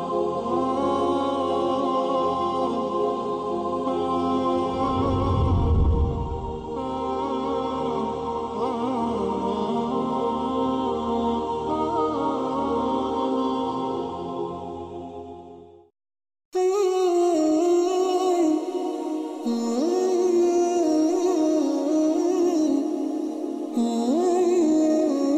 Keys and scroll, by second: 0.9 space, 1.6 space, 7.5 alt+space, 8.0 alt+space, 9.1 space, 13.7 ctrl+alt+space, 18.3 space.